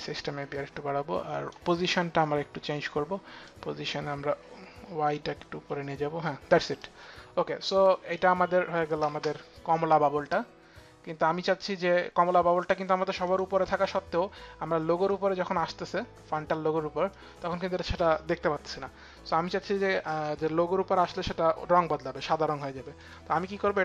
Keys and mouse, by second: 3.1 click, 7.8 click, 8.6 space, 12.8 click, 14.7 click, 17.0 click, 22.5 click.